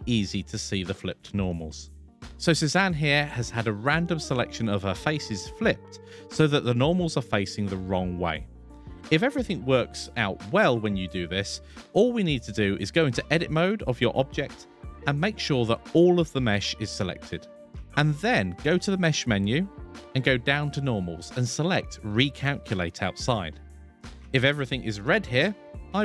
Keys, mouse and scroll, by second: 12.9 click, 13.8 Tab, 14.9 a, 18.2-23.2 drag.